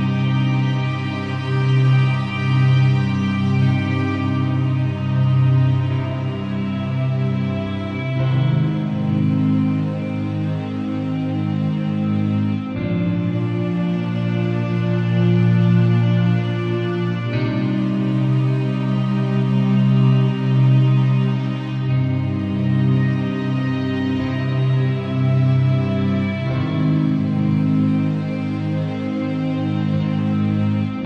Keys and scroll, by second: 4.6 super+l, 30.8 Return.